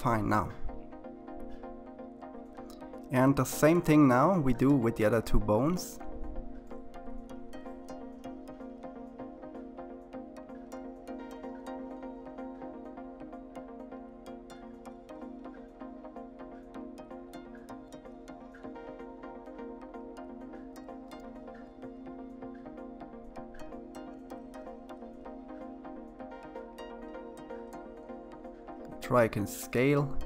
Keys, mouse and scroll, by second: 2.3 shift+click, 4.8 click, 6.0 drag, 6.5 click, 6.7 click, 7.2 click, 7.4 click, 8.6 click, 8.9 click, 9.6 click, 10.4 click, 11.5 s, 12.3 click, 13.4 click, 13.8 click, 14.0 click, 14.3 click, 15.0 click, 15.3 1, 16.0 click, 16.3 click, 17.3 click, 17.6 click, 18.2-19.1 drag, 19.4 s, 27.1 s, 29.9-30.2 middle drag.